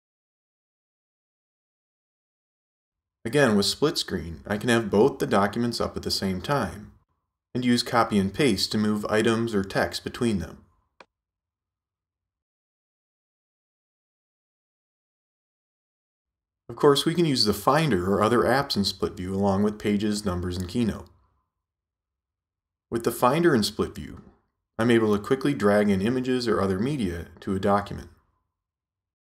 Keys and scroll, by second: 10.8 super+c, 12.8 super+v.